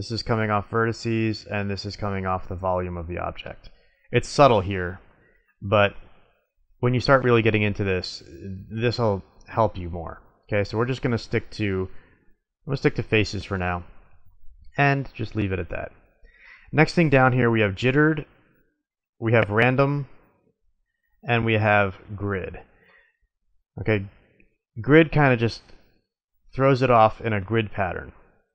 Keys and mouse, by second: 0.3-1.6 drag, 1.6 middle click, 2.1-2.6 drag, 3.8-4.9 middle drag, 10.1-11.4 drag, 11.9 middle click, 14.1-15.6 middle drag, 18.4-20.3 drag, 20.3-21.9 middle drag, 21.9 click, 26.9-28.3 drag.